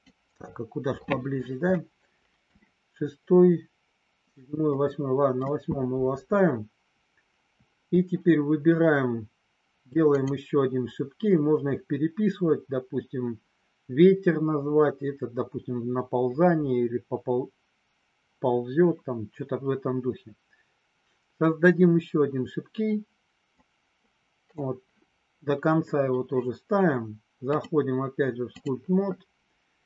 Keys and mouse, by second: 1.8 middle click, 4.7 middle click, 10.2 click, 23.6 click, 27.5-28.7 drag.